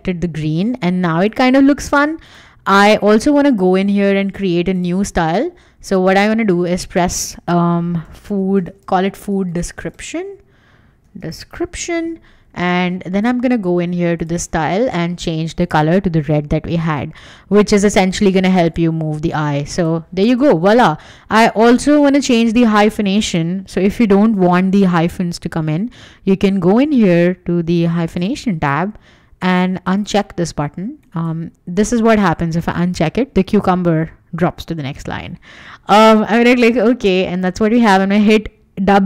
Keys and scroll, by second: 3.8 Escape, 8.5-12.0 typing, 20.3 Escape, 36.6 Escape, 37.4 w.